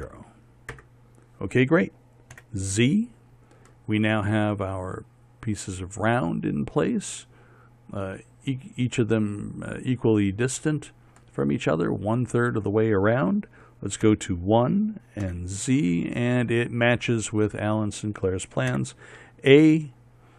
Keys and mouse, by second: 3.0 z, 6.4 middle click, 9.4-12.0 middle drag, 14.8 KP_1, 16.0 z, 18.2-19.4 middle drag, 19.4 a.